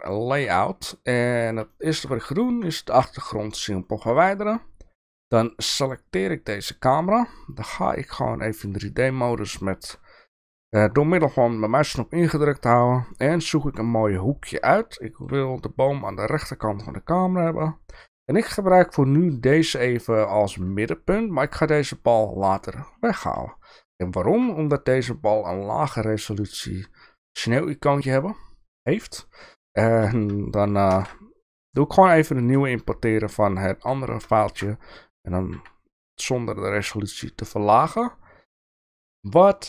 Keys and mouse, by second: 0.0 Delete, 0.0 click, 1.7-2.0 shift+middle drag, 2.2 click, 2.9 Delete, 4.0 shift+middle click, 5.8 click, 7.8-8.8 middle drag, 9.0-9.9 shift+middle drag, 11.3-12.4 middle drag, 13.1-13.4 shift+middle drag, 13.8-14.5 middle drag, 14.7-15.2 shift+middle drag, 16.0-16.3 shift+middle drag, 16.4-17.9 middle drag, 19.5-20.5 shift+middle drag, 23.5 shift+middle click, 25.5-27.5 shift+middle drag, 28.3 middle click, 29.2-29.9 shift+middle drag, 30.9 ctrl+alt+KP_0, 32.1-32.5 middle drag, 33.0-33.9 middle drag, 34.4 middle drag, 35.5 g.